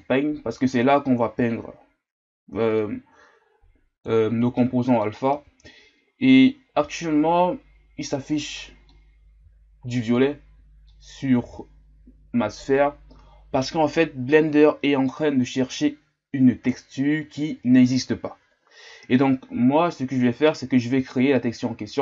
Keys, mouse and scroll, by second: 0.0-2.4 drag, 3.0-4.6 drag, 4.6-7.1 middle drag, 7.1-8.9 scroll up 6, 8.9-15.5 middle drag, 15.5-22.0 drag.